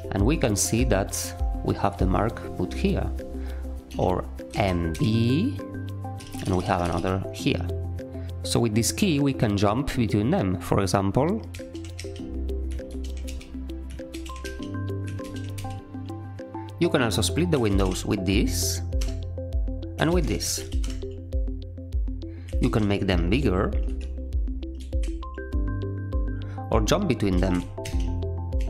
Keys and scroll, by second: 3.9 k, 4.5 m, 4.9 b, 6.2-7.3 typing, 11.5-15.5 typing, 17.3-18.2 typing, 19.0 Return, 19.7-21.3 typing, 22.6 ctrl+w, 23.9 5, 24.8 <, 27.1-28.3 typing.